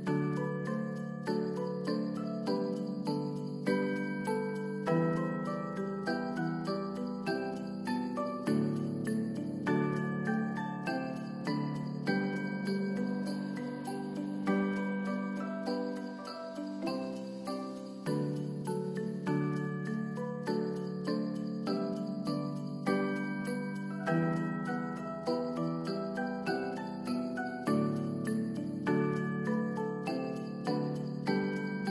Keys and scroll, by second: 1.5 Return, 5.7 0, 5.8 Return, 24.0 1, 24.5 Return, 26.0 ctrl+s.